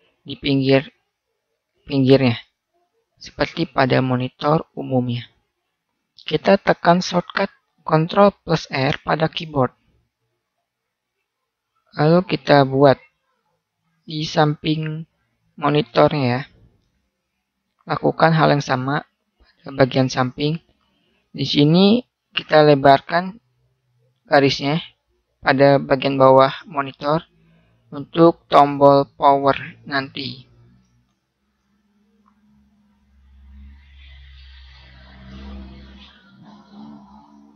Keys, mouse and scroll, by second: 2.0-4.7 middle drag, 9.6 ctrl+r, 16.7 ctrl+r, 22.0-24.7 middle drag, 26.0-30.0 middle drag, 31.3 ctrl+r, 32.7 middle click.